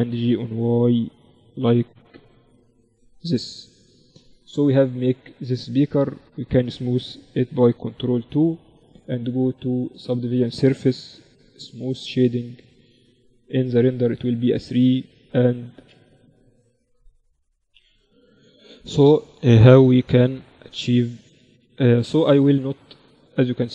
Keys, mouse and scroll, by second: 3.4 Tab, 7.9 ctrl+2, 10.7 ctrl+t, 11.6-15.1 drag, 12.1 t, 13.9 t, 14.6 t, 15.4 Tab, 19.4 ctrl+r, 20.9 Tab.